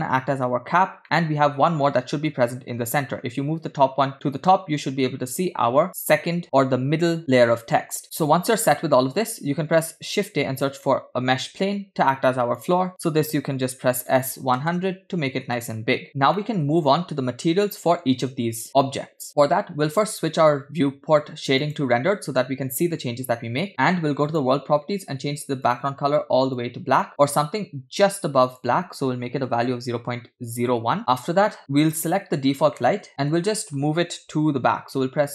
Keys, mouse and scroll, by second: 1.0-1.4 middle drag, 2.4 g, 8.0 scroll down 3, 8.1-9.6 middle drag, 10.1 shift+a, 14.1 s, 16.4-18.3 middle drag, 22.6 click, 24.3 click, 25.8 click, 31.9 click, 32.8-33.3 scroll down 3, 33.1 middle click, 33.9 g.